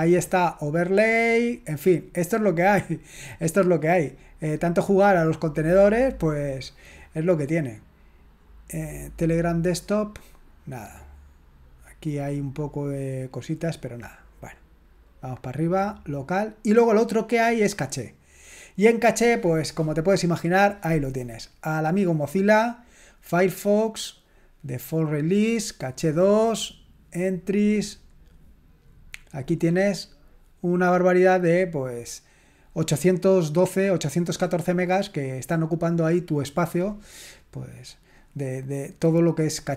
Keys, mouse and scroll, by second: 0.4 click, 3.8 click, 4.9 click, 6.4 click, 14.3 click, 21.6 click, 24.2 click, 25.5 click, 29.5-29.9 scroll down 1, 29.9-30.4 scroll up 1, 31.5 scroll up 1, 35.5-35.8 scroll up 1, 36.4 click, 39.0 click.